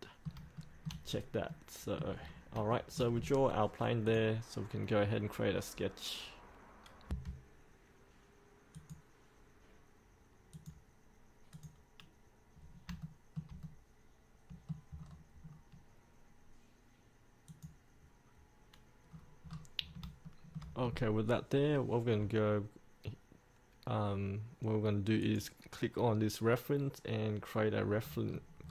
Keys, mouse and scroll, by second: 0.0 middle click, 0.7 shift+middle click, 1.3-1.6 scroll down 1, 1.6 middle click, 2.4-2.7 scroll down 1, 2.9 shift+middle click, 3.3 scroll up 1, 4.2 click, 7.3 F8, 8.9-10.1 drag, 12.8 scroll up 1, 13.2 shift+middle click, 13.8-15.2 middle drag, 15.2 scroll down 1, 17.7 click, 19.3-19.7 scroll down 1, 20.0 scroll up 1, 20.4 shift+middle click, 21.0-25.4 scroll down 1, 25.4 click, 28.1 scroll down 1, 28.4 scroll up 1.